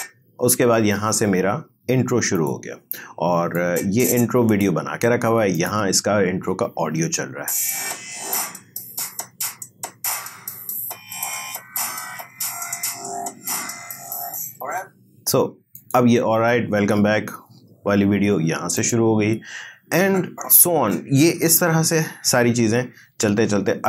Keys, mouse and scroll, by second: 1.3 scroll down 1, 2.4-5.6 drag, 7.2 space, 14.6 space, 15.8 click, 17.4 scroll down 1, 18.8-21.7 drag, 21.7-22.8 alt+scroll down 1.